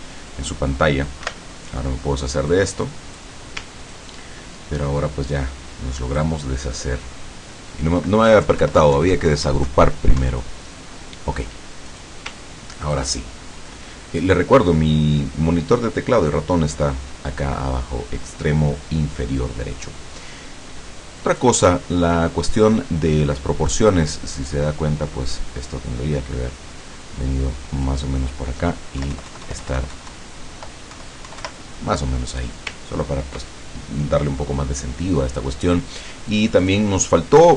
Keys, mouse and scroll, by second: 1.3 Delete, 2.5 click, 3.9-6.4 ctrl+drag, 6.7-7.2 ctrl+scroll up 2, 8.3 Left, 11.9 click, 12.5-12.9 ctrl+scroll down 2, 13.3 ctrl+click, 19.8-21.7 drag, 24.5-28.1 drag, 29.1 Left, 32.5 click, 32.9 ctrl+scroll down 2, 36.0 click, 36.4 click, 37.4 click.